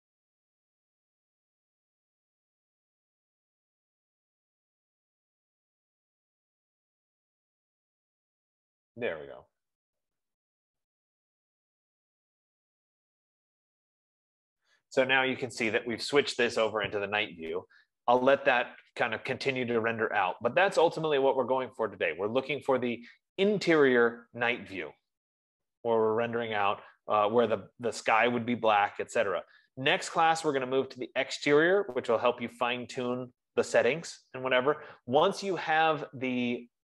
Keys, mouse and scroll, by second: 16.2 F15.